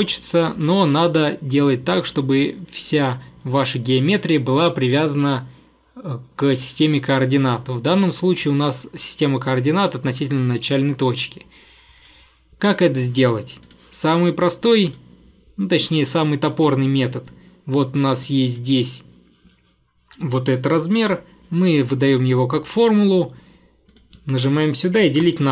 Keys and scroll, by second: 21.1 =, 24.8-25.5 typing.